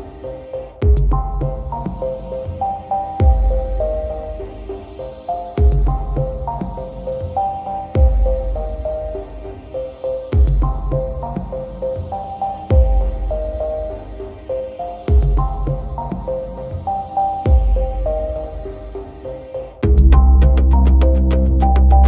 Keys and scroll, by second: 12.9 ctrl+alt+shift+e, 17.3 ctrl+alt+shift+e.